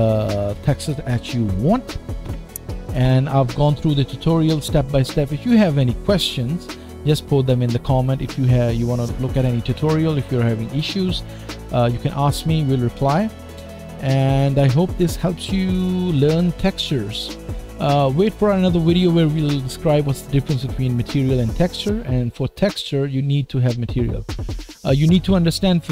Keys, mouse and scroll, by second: 0.0-25.9 middle drag.